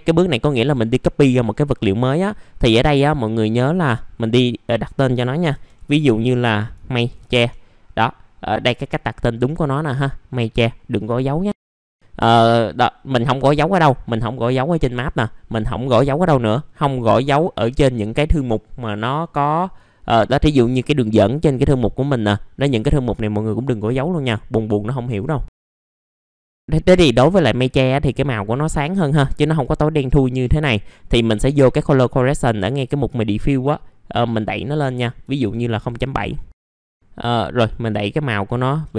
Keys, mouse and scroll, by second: 0.1 middle click, 1.4 click, 9.3 click, 11.5 middle click, 11.5 scroll down 1, 11.6 middle click, 12.4-13.4 middle drag, 13.8 click, 26.1 middle click, 26.3 scroll up 1, 26.4 middle click, 27.2 click, 35.2 KP_0, 35.4 KP_Decimal, 35.6 KP_7, 37.5 click.